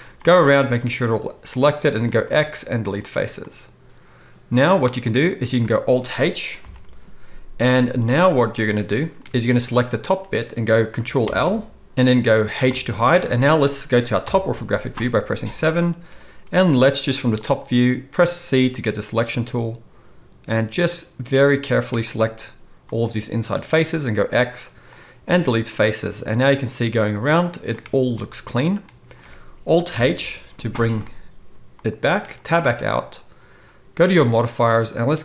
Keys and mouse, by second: 2.2 x, 6.6 alt+h, 9.8-34.2 middle drag, 11.2 ctrl+l, 11.3 ctrl+o, 12.6 h, 14.2 KP_7, 16.0 c, 24.1 x, 29.9 alt+h, 32.4 Tab, 34.2-35.2 drag.